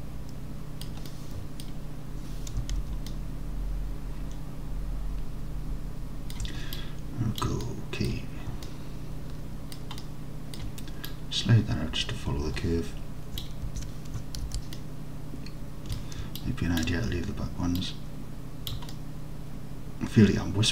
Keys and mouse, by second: 1.1-1.7 middle drag, 2.8 alt+z, 3.2 alt+middle click, 4.1-6.4 alt+middle drag, 6.8-7.5 drag, 7.7 alt+middle click, 8.7 alt+middle click, 9.7 alt+middle click, 10.1 alt+middle click, 11.2-13.5 drag, 13.7 ctrl+z, 14.5 alt+z, 14.8-16.0 alt+drag, 16.5 ctrl+click, 17.9 click, 19.0-20.7 alt+middle drag.